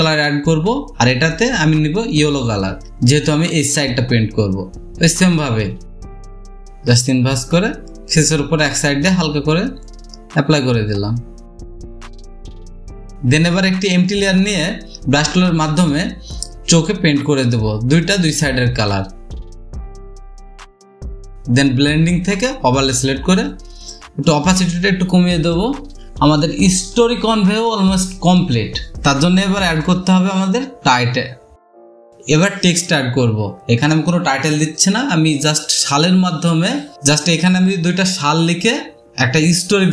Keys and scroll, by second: 4.0 ctrl+z, 4.0 v, 7.6 ctrl+i, 7.7 typing, 16.3-16.9 typing, 18.6 typing.